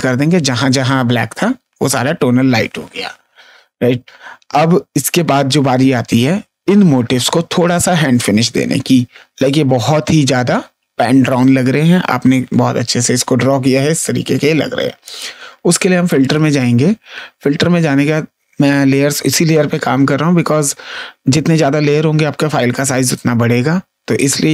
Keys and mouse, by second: 15.0 click, 16.2 click, 24.1 click.